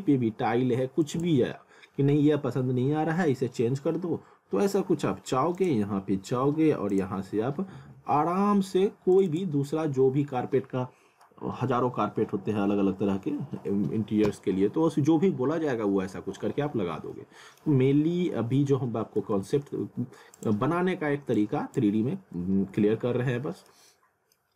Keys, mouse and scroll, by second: 1.0 click, 5.6 click, 7.6 click, 9.1 click, 17.1 middle click, 19.2 ctrl+z, 20.4 click, 22.2 scroll down 1, 22.8 alt+middle click, 24.5 scroll.